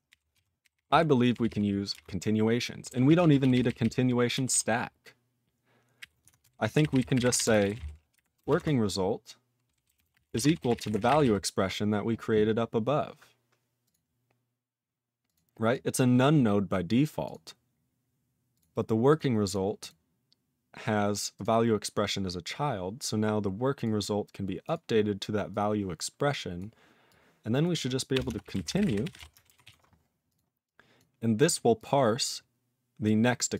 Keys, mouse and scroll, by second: 0.1 ctrl+n, 0.3 ctrl+a, 0.6 ctrl+k, 0.8 ctrl+k, 0.8 ctrl+k, 1.3 ctrl+p, 1.4 ctrl+p, 1.9 ctrl+space, 1.9 ctrl+e, 2.8 ctrl+g, 3.0 ctrl+a, 3.2 ctrl+p, 3.4 ctrl+k, 3.5 ctrl+k, 3.6 ctrl+k, 3.8 ctrl+k, 4.6 ctrl+s, 6.0 ctrl+o, 6.2 Tab, 6.5-11.7 typing, 12.1-13.2 scroll up 9, 13.3 scroll up 3, 13.8 click, 13.9 click, 15.2 click, 15.3 click, 15.7 click, 16.7 click, 17.2 click, 17.2 click, 17.3 click, 17.7 scroll up 2, 18.5 click, 18.5 click, 19.0 click, 19.2 click, 19.4 click, 19.5 click, 19.8 click, 19.8 click, 20.5-20.9 scroll down 4, 21.3 click, 21.4 click, 23.8 click, 23.8 click, 24.6 click, 24.7 click, 25.5 click, 26.5 click, 27.0 click, 27.6 click, 28.1-29.7 typing, 29.7 ctrl+s, 30.2 click, 30.3 click, 30.6 double click, 30.9 double click, 31.4 click, 31.4 click, 31.7 click, 31.8 click, 33.0 click, 33.2 click, 33.5 click.